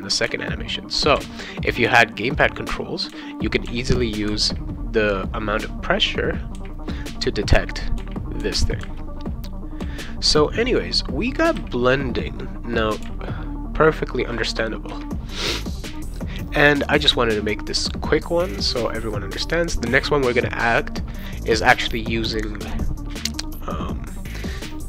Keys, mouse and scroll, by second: 0.2 v, 1.2 c, 1.8 v, 3.1 v, 3.7 c, 4.3 v, 6.5-9.8 typing, 11.5 c, 13.0 v, 15.9 click.